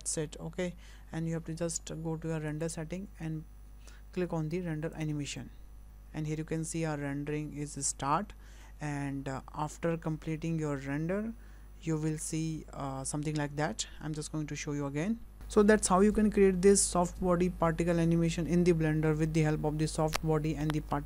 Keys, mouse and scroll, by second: 1.9-2.5 scroll up 3, 2.5 click.